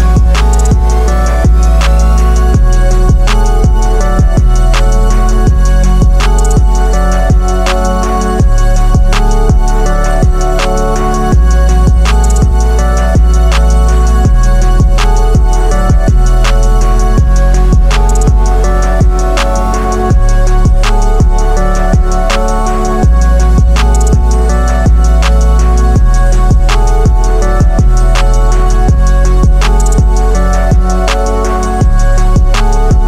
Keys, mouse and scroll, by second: 2.6 ctrl+z, 4.4-5.2 click, 5.6 Left, 8.1-8.9 drag, 9.4 Right, 12.1 click, 18.2 ctrl+a, 18.8 ctrl+c, 19.9 click, 21.7 ctrl+v, 23.8 right click, 26.9 super+=, 28.3 super+-, 29.9 right click, 32.2 =.